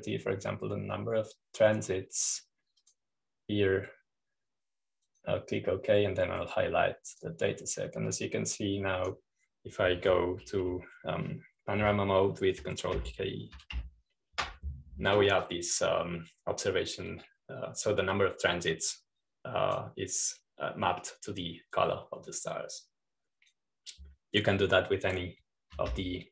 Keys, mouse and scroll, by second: 0.2-1.7 scroll up 2, 1.7-2.8 scroll down 2, 4.7-6.5 drag, 7.0-11.8 drag, 14.8 u, 15.6 ctrl+k, 17.5-20.7 drag, 21.0-22.8 drag, 24.6-26.0 drag.